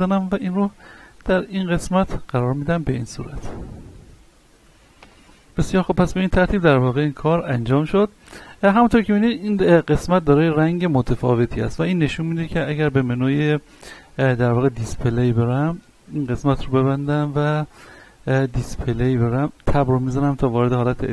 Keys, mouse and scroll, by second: 2.4-3.4 typing, 2.7 click, 3.0-3.4 scroll down 1, 3.8-4.4 scroll down 2, 4.1 middle click, 5.7 shift+middle click, 6.6-7.2 middle drag, 7.5 Tab, 8.4 middle click, 9.8 middle click, 12.6 n, 14.0-14.4 scroll down 1, 15.3 scroll up 1, 16.1 click, 17.7-18.7 scroll up 1, 18.7 click, 19.3 Tab, 19.8 middle click, 20.3-21.1 scroll up 1.